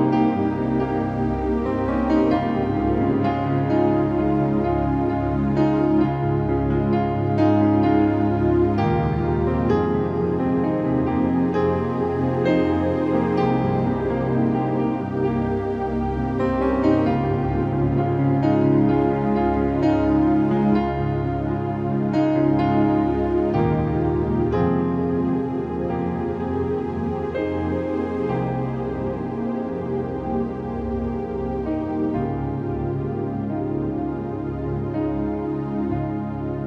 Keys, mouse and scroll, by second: 1.6 click, 6.7-8.9 drag, 9.6-10.6 typing, 10.0-10.4 scroll up 1, 10.8-11.4 scroll up 1, 13.4 x, 14.0 click, 16.1-17.1 typing, 16.5-17.1 scroll up 2, 18.0 click, 21.8 click, 22.7 scroll down 1, 23.0 click, 23.4 ctrl+z, 23.7-24.2 scroll down 1, 24.2 space, 24.3 click, 24.4 space, 24.5 scroll up 1, 24.8 click, 25.1 ctrl+z, 25.3-25.8 scroll up 1, 25.8-26.6 typing, 27.4 click, 28.7 typing, 29.4-30.0 scroll down 1, 30.0 2, 31.1 click, 32.8-34.0 typing, 33.8 scroll up 2, 34.8 click, 36.1-36.6 scroll down 1.